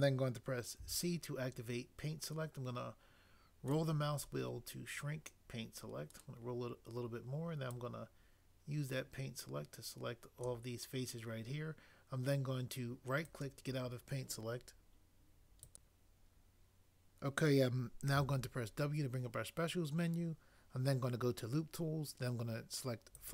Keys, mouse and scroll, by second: 0.7 c, 3.7 scroll up 1, 6.2 scroll up 1, 13.4 right click, 18.2 w.